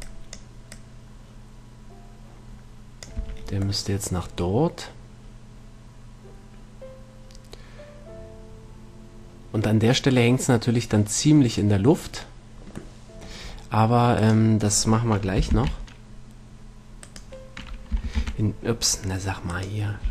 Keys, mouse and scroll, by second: 0.1 b, 1.0-2.8 drag, 3.5 a, 11.9 middle click, 13.7 middle click, 15.8 ctrl+l, 18.5 l.